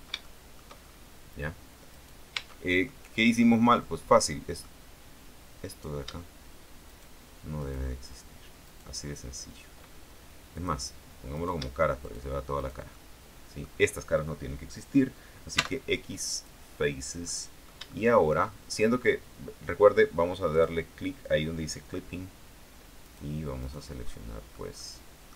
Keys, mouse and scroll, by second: 0.9-2.1 shift+scroll up 1, 2.1 right click, 2.5 Tab, 3.0 middle click, 5.9 right click, 7.0 shift+right click, 7.7 shift+right click, 8.8 shift+right click, 10.7 click, 11.5 shift+right click, 12.1 shift+right click, 12.7 shift+right click, 13.1 shift+middle click, 15.7 x, 16.5 click, 17.1-17.4 scroll down 1, 17.4 middle click, 18.1 shift+middle click, 18.9 shift+scroll up 1, 20.7 click, 23.2 right click, 23.7 right click, 24.3 middle click, 24.9 middle click.